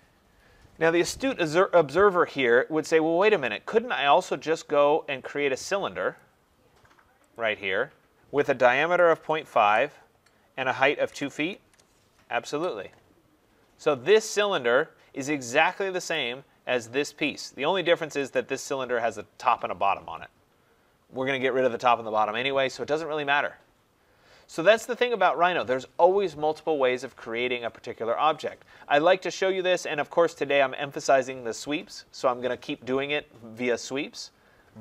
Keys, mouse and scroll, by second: 6.1 click, 7.3 click, 8.8-9.6 typing, 10.8-13.2 typing, 13.7 scroll, 13.9 middle click, 13.9 middle click, 14.4 click, 16.1 click, 18.3 click, 24.0 middle click, 24.1 middle click, 24.2 middle click, 24.7 click.